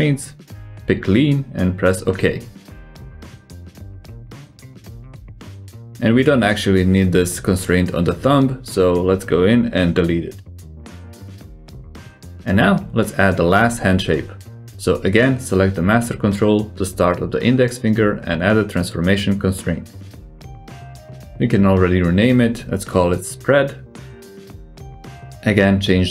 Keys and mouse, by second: 2.3-3.6 middle drag, 3.6 g, 11.1 click, 12.4-12.8 drag, 12.8 g, 18.5-18.9 drag, 19.1 shift+click, 19.7 ctrl+shift+c, 22.9 click, 23.7-25.7 drag.